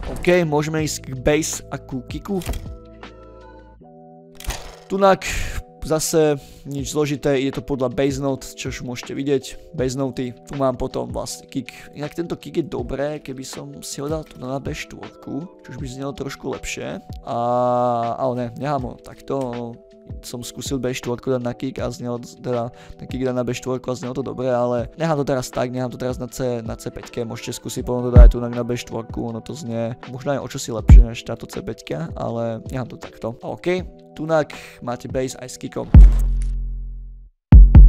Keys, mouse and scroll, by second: 0.4 scroll down 2, 0.9 ctrl+scroll up 2, 2.1 click, 4.7 middle drag, 5.8 click, 7.1-8.4 drag, 8.7 ctrl+middle click, 8.7 ctrl+scroll, 9.2 click, 9.9 click, 10.6 ctrl+middle drag, 11.2 click, 11.8 click, 13.0 ctrl+a, 14.1 shift+Down, 14.5-15.4 scroll down 2, 15.5 ctrl+scroll up 2, 16.4 middle click, 16.4-17.1 scroll up 6, 16.6 ctrl+middle click, 17.0 middle click, 18.8 ctrl+a, 19.2 shift+Up, 20.2 click, 24.6 click, 28.0 click, 30.8 click, 32.8-34.0 middle drag, 34.0 click, 34.3 ctrl+middle drag, 35.7 Return, 35.9 space, 36.5 middle click, 37.6 drag.